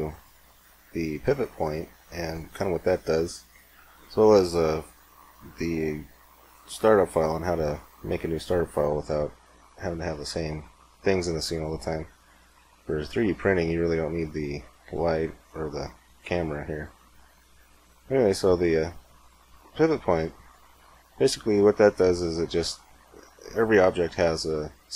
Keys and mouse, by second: 0.4-2.5 middle drag, 8.3-11.3 middle drag, 13.7-17.6 right drag, 17.6 middle click, 18.3-20.1 right drag, 20.1-21.3 middle drag, 21.3-22.5 drag, 23.3-24.7 drag, 24.7-24.9 middle drag.